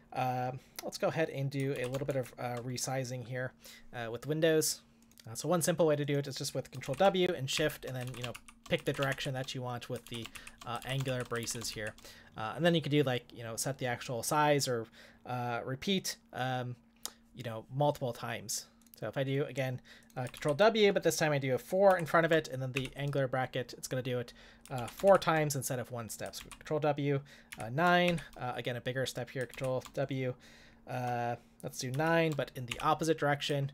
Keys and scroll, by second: 1.8 ctrl+w, 2.1 shift+Left, 6.9 ctrl+w, 7.5 shift+., 8.0 ctrl+w, 8.3 shift+,, 8.8 ctrl+w, 9.1 shift+., 10.0 ctrl+w, 10.3 shift+., 10.8 ctrl+w, 11.1 shift+., 11.4 ctrl+w, 20.4 ctrl+w, 21.9 5, 22.7 shift+., 24.7 ctrl+w, 25.1 shift+., 26.4 ctrl+w, 27.5 9, 28.1 shift+., 29.5 ctrl+w, 31.9 9, 32.7 shift+,.